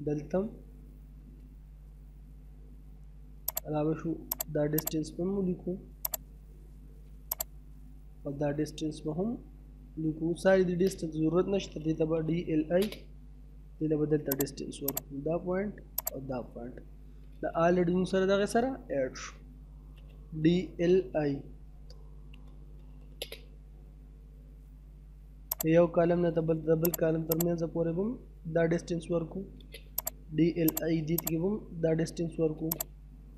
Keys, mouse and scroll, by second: 0.0 middle click, 0.1 scroll down 1, 0.3 middle click, 0.7 space, 2.2-2.6 scroll up 1, 3.5 click, 6.4 space, 7.3 click, 10.5 middle click, 11.2-12.4 typing, 12.8 scroll up 1, 14.3 click, 16.6-17.0 scroll down 1, 17.0 middle click, 19.5 typing, 22.8 space, 23.1 scroll up 1, 25.5 click, 28.0 middle click, 28.4 scroll down 1, 28.6 middle click, 29.1 space, 29.4-30.0 scroll up 1, 30.0 click, 31.5 scroll down 1, 31.8 middle click, 32.1 space, 32.7 click.